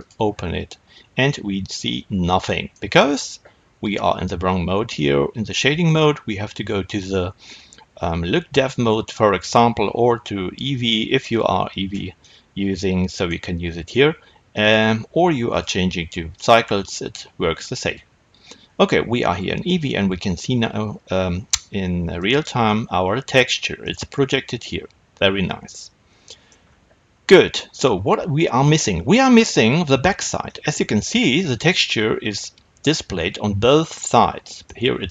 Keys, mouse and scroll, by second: 0.0 click, 1.1-8.5 middle drag, 8.5 click, 12.1-35.1 middle drag.